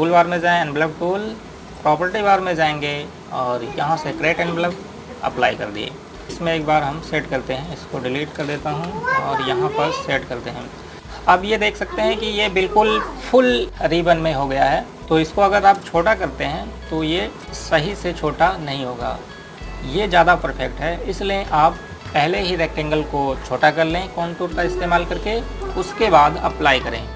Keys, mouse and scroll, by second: 1.2 click, 8.0 right click, 8.5 click, 9.6 Delete, 10.3 click, 11.1-11.5 scroll up 1, 11.5 Page_Up, 16.6 shift+Num_Lock, 16.9 shift+click, 17.4 scroll down 1, 18.5 shift+click, 21.5 click.